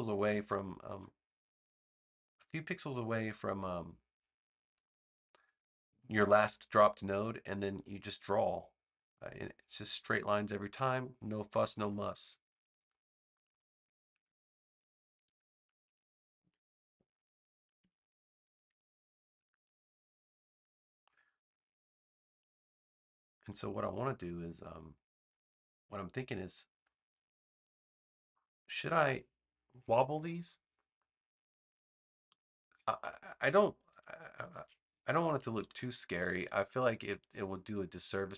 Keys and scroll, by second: 4.5 p, 11.7 v, 14.0 a, 33.8 super+z, 34.4 super+z, 35.5 super+-.